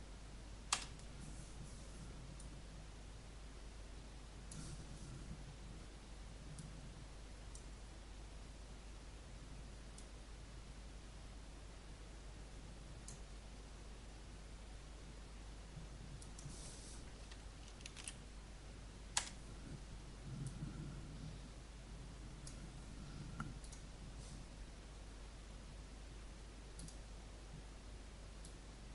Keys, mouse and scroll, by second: 0.7 Return, 2.4-17.3 drag, 17.9 shift+d, 19.1 Return, 20.3-23.4 drag, 26.5-28.9 drag.